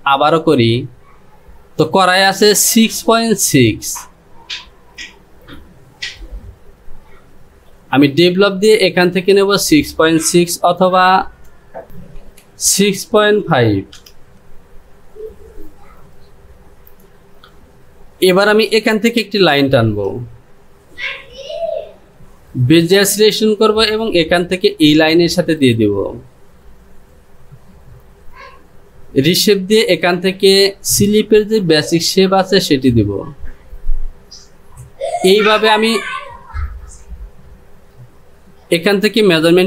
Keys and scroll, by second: 11.4 Down, 12.4 Down.